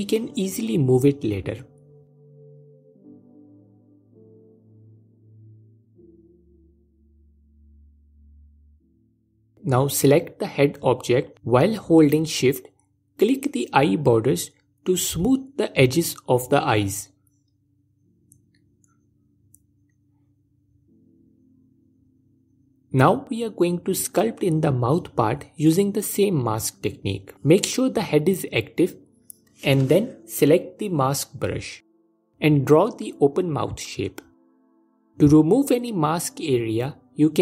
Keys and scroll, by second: 9.7 alt+q, 28.7 f.